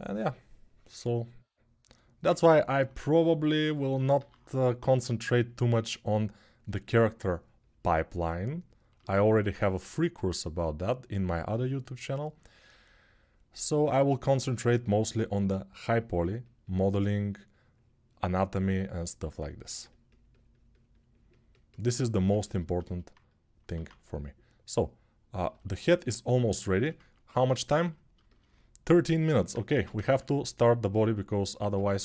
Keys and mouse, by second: 3.9 alt+q, 23.6 alt+q, 29.5 ctrl+Tab, 29.8 shift+a, 31.5 Tab.